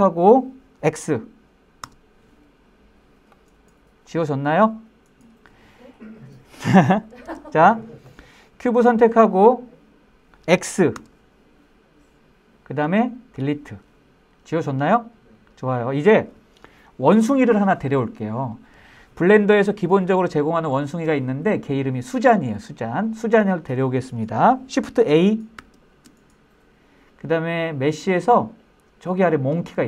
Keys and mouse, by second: 1.8 x, 7.2 super+z, 8.1-9.1 drag, 11.0 x, 25.6 shift+a.